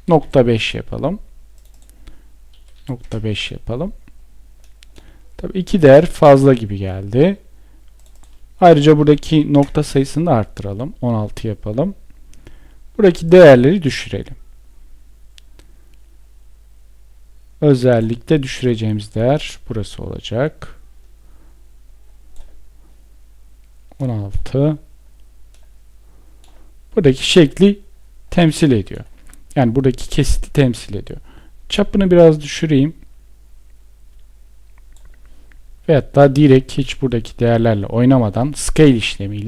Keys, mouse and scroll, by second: 2.3 Return, 8.8 Return, 35.5 ctrl+z.